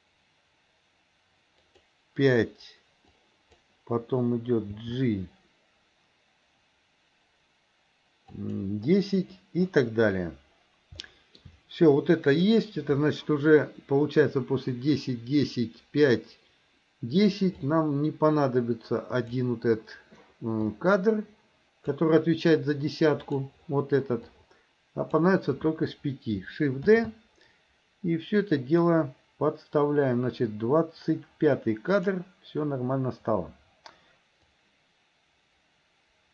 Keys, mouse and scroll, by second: 3.2-3.7 drag, 4.7 g, 11.1 shift+middle click, 17.6-19.4 drag, 20.7-22.0 drag, 23.2 click, 24.3 click, 27.0 shift+d, 34.6-36.3 drag.